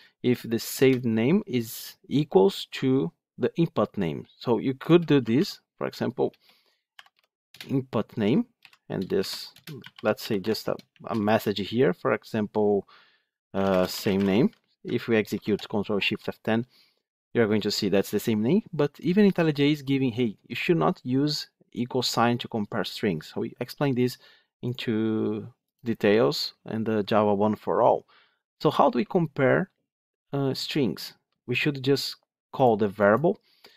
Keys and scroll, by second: 0.7 Return, 7.5 Return, 10.3 Tab, 15.2 ctrl+shift+F10.